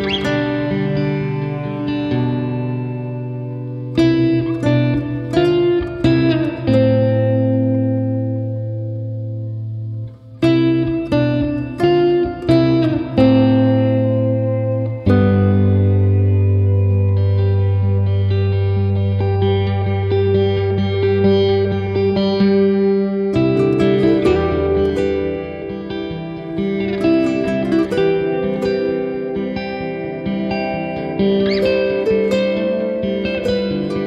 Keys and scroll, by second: 6.8 super+-.